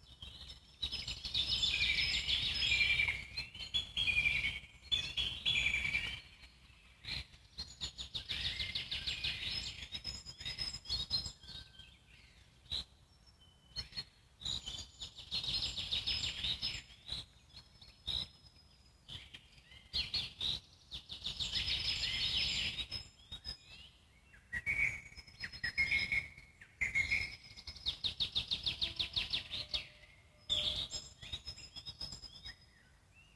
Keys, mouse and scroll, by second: 0.1 shift+click, 1.6 z, 2.0-3.7 alt+middle drag, 3.7 g, 7.6 shift+d, 15.3 z, 22.8 Tab, 23.2 click, 24.0 click, 24.5 click.